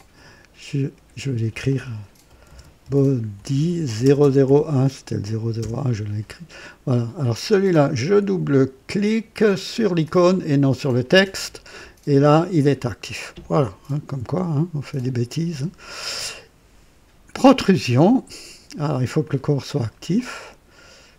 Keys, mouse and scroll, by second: 0.9 F2, 2.2-4.3 typing, 5.5 KP_Enter, 5.5 typing, 8.0 click, 9.7 click, 17.4 click, 19.1 click, 20.1 click.